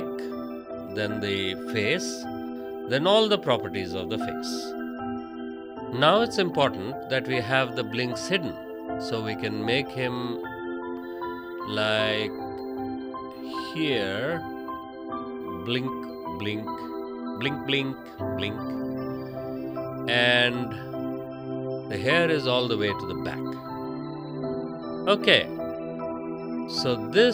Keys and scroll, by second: 21.4 space, 25.3 space.